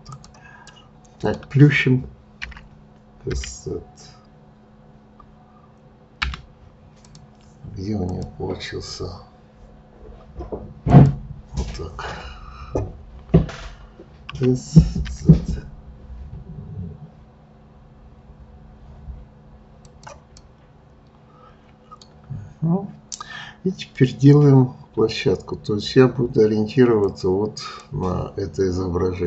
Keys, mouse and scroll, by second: 0.7-2.4 middle drag, 2.4 s, 6.9 click, 8.1-11.1 drag, 14.3 s, 20.4-23.4 middle drag.